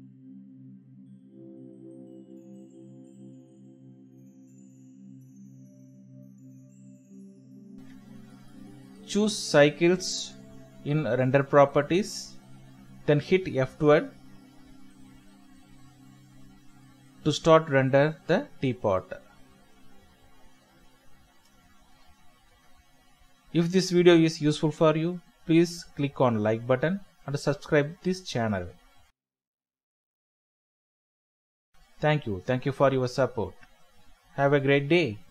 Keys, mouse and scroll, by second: 0.5 Escape, 3.8 F12, 7.0 Escape, 8.5 typing, 8.7 Return, 11.5 typing, 12.0 Return, 13.0-13.4 typing, 13.5 Return, 14.3 Escape, 16.1 typing, 16.6 Return, 19.0 F12.